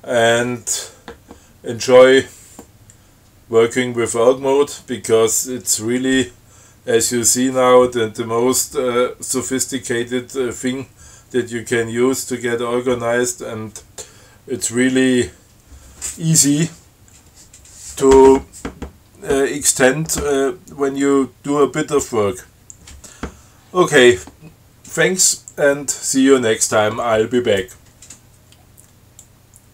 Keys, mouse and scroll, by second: 29.4 click.